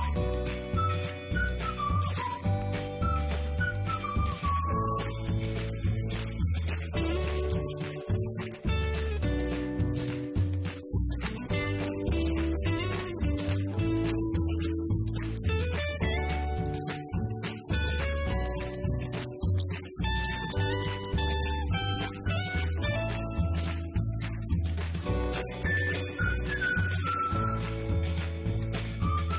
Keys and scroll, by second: 20.3-21.7 typing, 22.1 Return.